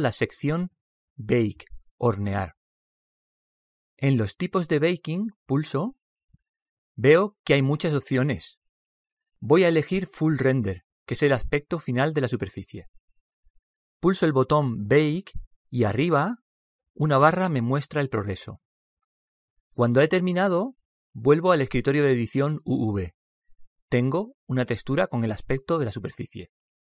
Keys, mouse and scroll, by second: 5.1 click, 14.3 click, 21.7 click.